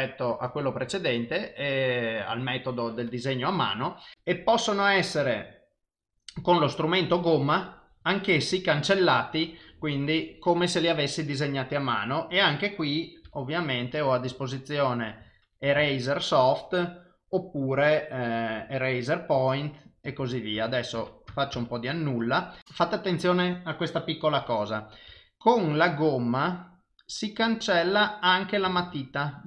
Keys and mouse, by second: 4.1 click, 6.5 click, 7.0 click, 9.2 click, 13.3 f, 14.3 click, 15.8 ctrl+z, 17.8 click, 19.4 click, 20.2 ctrl+z, 20.6 ctrl+z, 21.0 ctrl+z, 21.3 ctrl+z, 21.6 ctrl+z, 25.1 f, 26.3 click, 28.8 ctrl+z, 29.3 click.